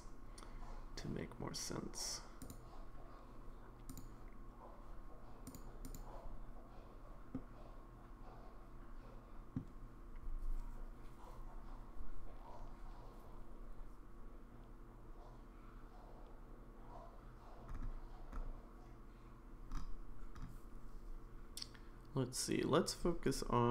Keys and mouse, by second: 2.4 click, 3.9 click, 5.5 click, 5.9 click, 7.3-9.5 middle drag.